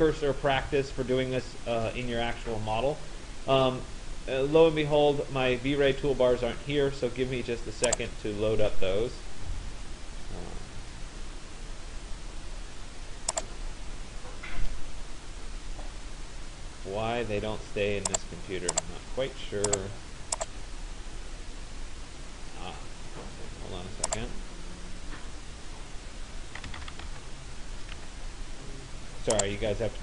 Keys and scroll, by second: 26.2 s, 26.8 u, 27.1 m, 28.0 Escape.